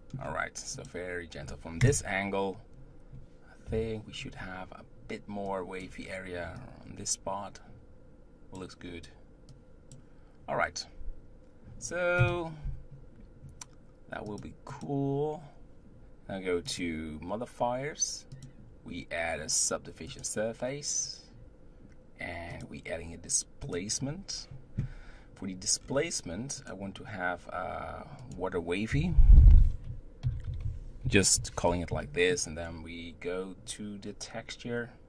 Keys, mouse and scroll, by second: 0.8 click, 1.8 KP_0, 3.7 KP_7, 5.5 click, 6.1-6.6 scroll up 1, 6.6-12.2 drag, 12.2 KP_0, 14.3-16.8 drag, 18.3-21.5 drag, 22.5-25.5 drag, 25.8-26.6 scroll down 2, 26.6-27.3 drag, 28.2-31.2 drag.